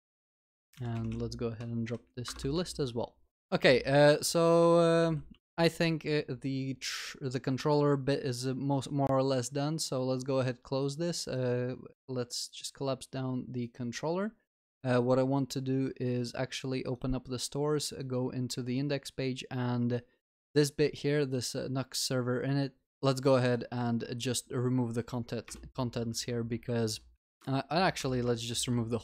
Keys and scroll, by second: 2.7 ctrl+s, 3.4 ctrl+alt+shift+l, 5.3 ctrl+s, 26.2 ctrl+Delete, 28.0 Delete, 28.0 ctrl+y, 28.6 ctrl+s.